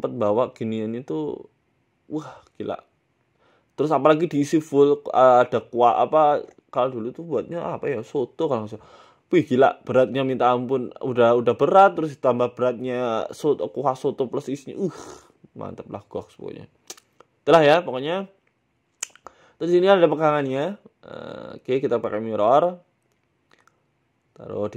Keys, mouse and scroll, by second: 0.0 Tab, 0.0 middle click, 0.0 scroll down 8, 0.2 scroll up 1, 0.4 scroll down 1, 1.4 w, 2.0 middle click, 2.9 middle click, 3.7 right click, 4.1 Tab, 4.5 Tab, 5.0 click, 6.5 middle click, 6.9 scroll down 2, 7.1 middle click, 7.6 right click, 8.1 KP_1, 8.7 s, 9.5 scroll down 1, 9.6 scroll down 1, 10.1 g, 11.5 middle click, 12.2 middle click, 12.9 KP_1, 13.1 shift+a, 15.2 s, 16.4 r, 17.5 s, 18.2 s, 18.8 Tab, 19.2 click, 22.2 Tab, 22.7 g, 23.5 Tab, 24.2 g.